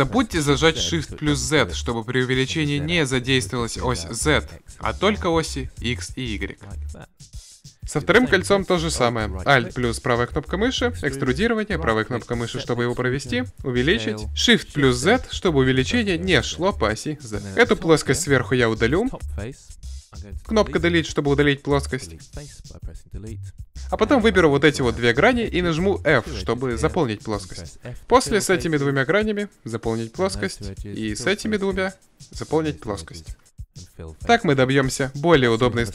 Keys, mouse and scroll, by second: 6.4-10.5 drag, 10.1 e, 12.9 s, 17.7-19.9 right drag, 19.9 Delete, 23.7 ctrl+Tab, 25.1-26.9 right drag, 27.1 f, 30.2 f, 33.1 f.